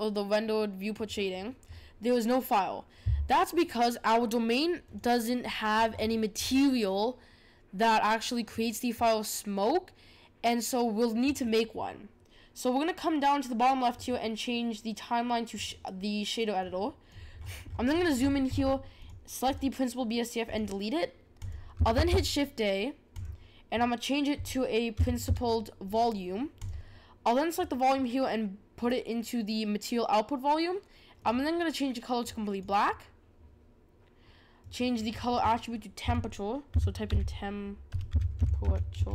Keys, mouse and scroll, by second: 4.8 click, 5.8-8.4 scroll up 14, 13.9-17.3 drag, 17.3-19.0 scroll up 33, 19.0 click, 19.4-21.4 right drag, 21.4 click, 21.9 shift+a, 27.5-30.6 drag, 31.2 click, 34.6-37.7 drag.